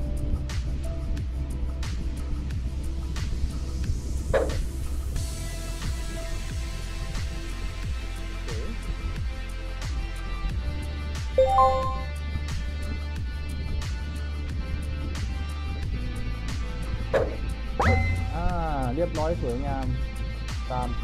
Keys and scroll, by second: 1.2 d, 3.3 a, 4.9 a, 6.4 w, 7.8 a, 9.0 s, 9.8 w, 11.9 d, 14.1 d, 15.5 a, 17.8 e, 19.2 w.